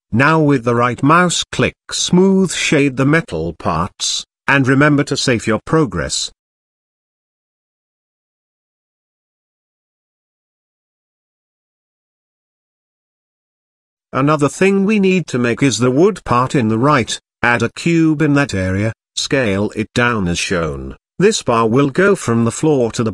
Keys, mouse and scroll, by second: 0.1 shift+e, 2.8 Tab, 3.4-4.1 middle drag, 4.4 click, 4.9-5.7 right drag, 5.7 shift+middle click, 7.9 click, 9.4 shift+middle drag, 9.9 click, 10.1 ctrl+z, 10.1 middle drag, 10.8 shift+middle drag, 11.6 ctrl+s, 14.3 middle click, 15.1 shift+middle click, 16.0 click, 16.8 click, 17.1 shift+a, 19.2 middle click, 19.7 shift+middle click, 20.4 s.